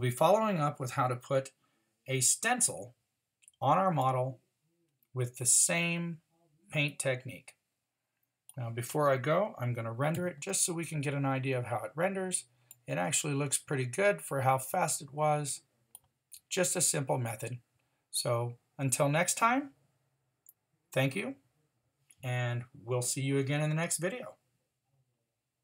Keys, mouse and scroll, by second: 10.1 shift+z.